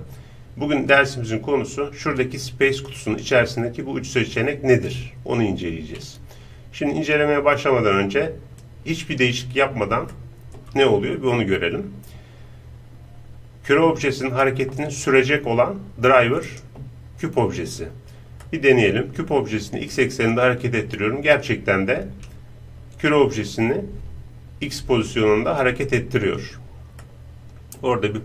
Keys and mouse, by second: 2.7-6.0 drag, 8.7-10.2 drag, 10.0-13.6 middle drag, 10.0 right click, 16.5-18.4 right drag, 18.4-22.0 middle drag, 19.9-22.0 drag, 19.9-22.0 right drag, 27.0-28.2 middle drag.